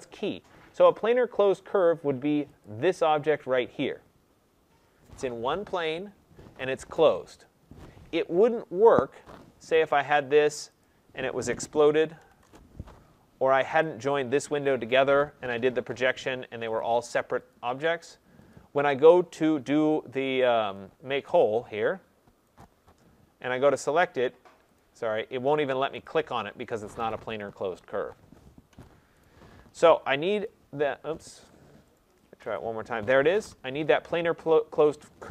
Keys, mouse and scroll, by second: 2.5-6.4 drag, 8.8 Escape, 9.6 click, 10.7 click, 11.2-12.1 typing, 12.3 Return, 13.7 click, 14.7 typing, 16.7 click, 17.4 click, 18.4 click, 21.2 click, 22.5 click, 23.8 click, 24.7 click, 25.9 click, 26.7 click, 28.6 Escape, 29.1 right click, 30.4 click, 31.3 Escape, 31.9 right click, 32.5 click.